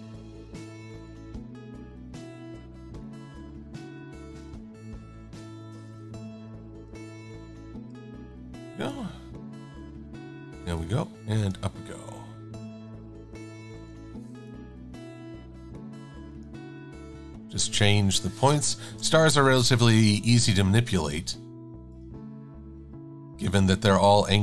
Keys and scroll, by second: 0.7 v, 4.6 e, 13.8 a, 14.8 Up, 15.3 Right, 17.1 Down, 18.9 shift+super+a, 19.2 v.